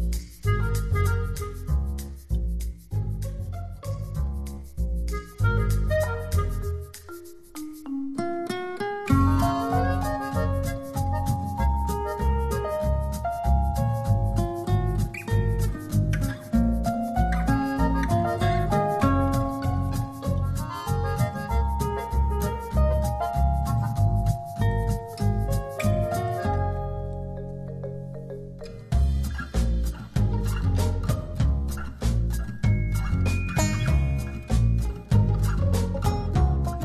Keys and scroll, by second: 14.6 super+z, 20.8 t, 30.3 0, 30.6 Return.